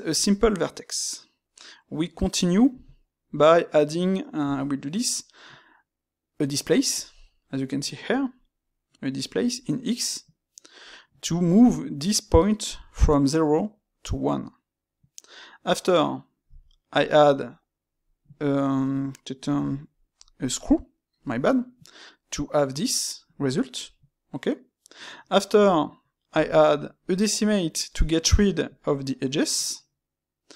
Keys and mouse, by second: 21.3-24.3 middle drag.